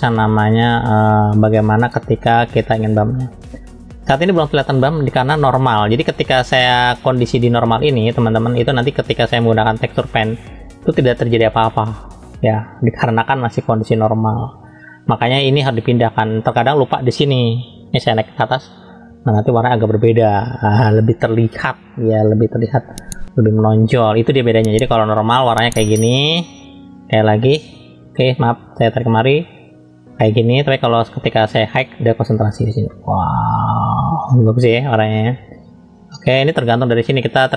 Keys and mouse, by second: 4.3 shift+middle click, 9.6 click, 11.0-13.0 drag, 18.0-18.8 drag, 22.1 middle click, 25.5 click, 28.3 shift+middle click, 29.0-29.8 drag, 31.1 click, 31.4 click, 32.9-34.9 middle drag, 36.6-37.5 drag.